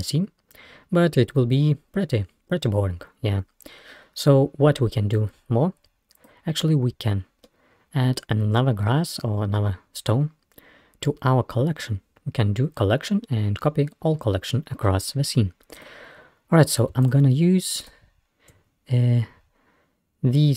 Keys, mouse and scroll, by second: 0.6-1.4 scroll up 1, 3.2-3.7 scroll down 1, 3.7-5.2 scroll up 1, 5.2-7.0 drag, 7.0-7.5 scroll down 2, 7.5-8.8 middle drag, 8.8-9.6 scroll up 2, 11.8 scroll up 1, 15.8 click, 17.1 shift+click, 17.8 shift+click.